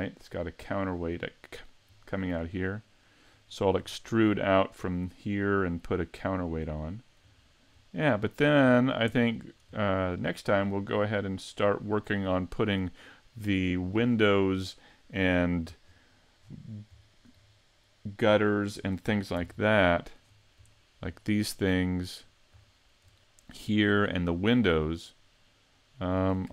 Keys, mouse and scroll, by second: 1.4-2.3 scroll down 2, 2.5 middle click, 3.4-3.9 scroll up 4, 3.9 shift+middle click, 6.8 shift+middle click, 7.3-8.7 scroll down 3, 7.8 middle click, 8.7 shift+middle click, 9.2 middle click, 9.8 shift+middle click, 10.5-11.1 scroll down 6, 11.4 middle click, 13.2 middle click, 14.0 shift+middle click, 14.1 shift+middle click, 15.4-15.8 scroll down 2, 15.8-16.5 scroll up 9, 17.0 shift+middle click, 18.3 shift+middle click.